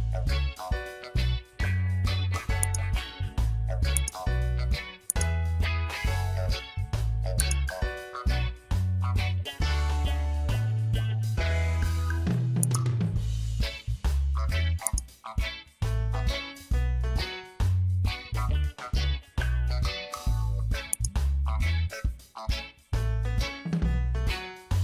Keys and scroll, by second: 12.0 ctrl+t, 18.5 Return, 20.0 ctrl+j.